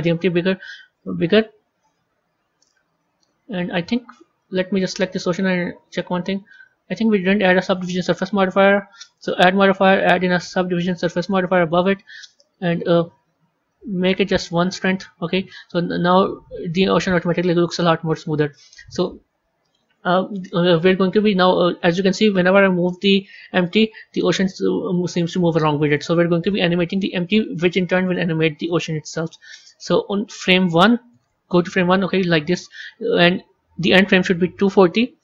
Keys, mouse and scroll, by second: 2.5-4.9 middle drag, 4.9 click, 5.7 Tab, 6.9 Tab, 9.0-12.1 drag, 13.9-15.0 drag, 15.0-16.2 scroll down 3, 16.2-19.3 middle drag, 19.7 click, 20.7 click, 22.1 g, 27.3-30.3 drag, 30.6-35.2 drag.